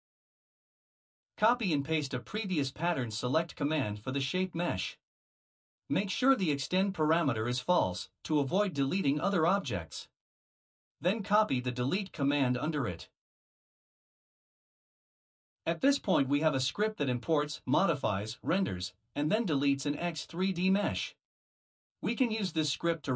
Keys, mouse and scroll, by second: 0.0-0.3 typing, 1.1 Return, 3.6 click, 3.9 click, 6.4 ctrl+c, 7.0 click, 7.7 ctrl+v, 8.6 Return, 10.4 click, 10.8 click, 12.9 ctrl+c, 13.7 click, 14.6 ctrl+v, 22.1 click, 22.5 Tab, 22.9 click, 23.0 Tab.